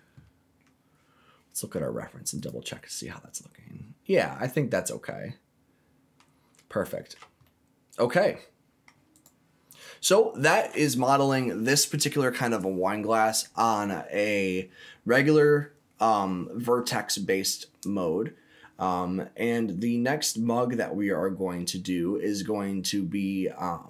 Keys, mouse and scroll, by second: 0.6 scroll down 1, 2.3 click, 3.0-6.1 middle drag, 6.1-6.6 scroll down 3, 6.7 shift+middle click, 7.1-7.4 shift+scroll down 2, 7.4-8.8 middle drag, 9.1 right click, 10.1-10.5 scroll down 1.